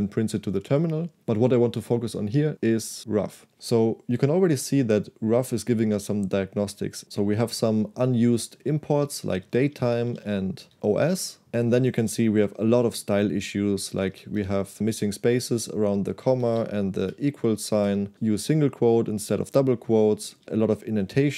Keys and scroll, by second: 9.3-10.8 typing, 10.7 Escape, 11.5 Escape, 12.5 j, 13.9 w, 14.1 w, 14.4 w, 16.2-17.9 typing, 20.3-21.3 typing.